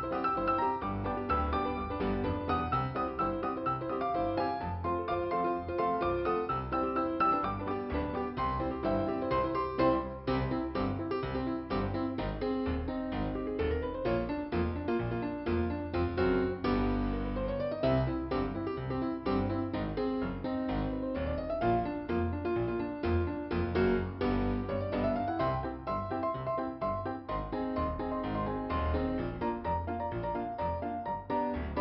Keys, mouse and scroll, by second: 0.4 right click, 1.3 click, 2.8 click, 3.8 click, 4.5-5.1 scroll down 2, 6.6 middle click, 7.5-8.6 scroll up 1, 8.6 scroll up 1, 8.8 click, 9.8 click, 10.4 scroll down 2, 13.1-14.2 scroll up 2, 14.6 click, 16.3 ,, 19.5 click, 27.2 f, 28.8-29.9 scroll up 1, 30.2 click.